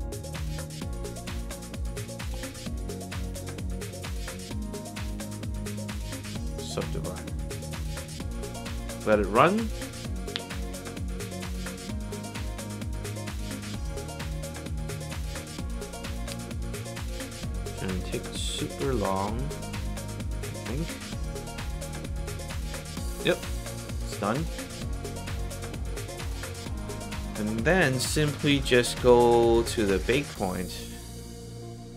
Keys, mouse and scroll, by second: 1.5 click, 2.9 click, 4.1 click, 6.5 click, 25.4 alt+click, 28.4 click, 29.1 click, 30.0 click, 30.3 click.